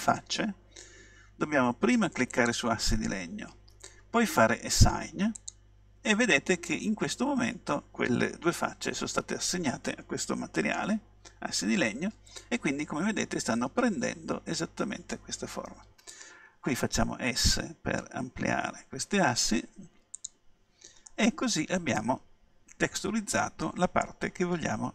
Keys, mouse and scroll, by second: 2.4-4.2 drag, 5.4-7.2 drag, 17.1 s, 17.8 click, 20.3-22.2 drag, 21.1 middle click, 22.2 middle click.